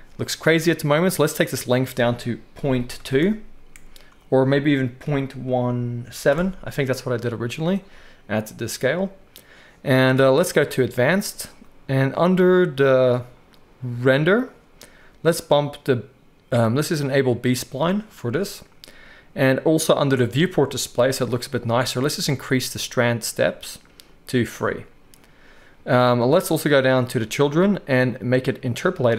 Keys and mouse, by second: 1.4-10.7 drag, 10.7-14.3 middle drag, 14.3-17.2 drag, 17.2-20.2 middle drag, 20.2-28.8 drag, 28.8-29.1 middle drag.